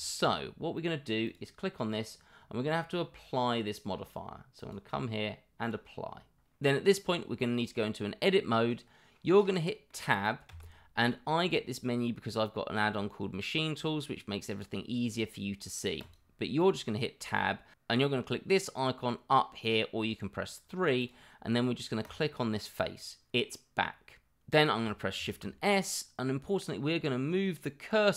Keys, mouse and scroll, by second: 0.0 middle drag, 0.7 middle click, 1.2 click, 4.5-6.1 drag, 6.6-7.0 middle drag, 7.7-9.9 middle drag, 10.4 Tab, 21.0 click, 21.8 click, 22.3-23.5 middle drag, 23.9 middle click.